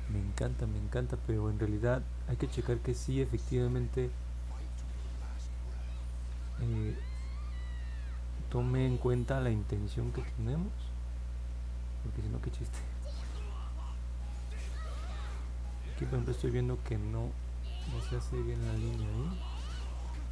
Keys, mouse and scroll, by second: 5.0 click, 5.6 click, 6.1 click, 6.6 click, 7.2 click, 7.7 click, 8.3 click, 8.8 click, 9.1 click, 9.6 click, 10.1 click, 10.6 click, 11.1 click, 11.6 click, 12.2 click, 13.6 click, 14.1 click, 14.7 click, 15.3 click, 15.9 click, 16.4 click, 19.5 click.